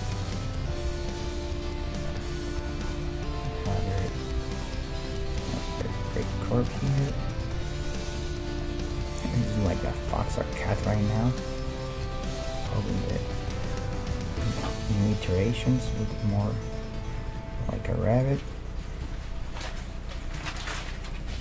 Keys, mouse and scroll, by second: 0.7 g, 2.3-8.9 right drag, 2.7 g, 3.9 g, 5.3 g, 6.3 g, 7.3 g, 8.9-11.9 middle drag, 9.7-11.5 right drag, 10.5 g, 12.3-13.7 right drag, 12.5-15.3 middle drag, 14.1 KP_1, 14.8 g, 16.1-20.6 right drag, 16.3 g, 17.5 g, 19.0 g, 21.1-21.4 right drag, 21.3 g.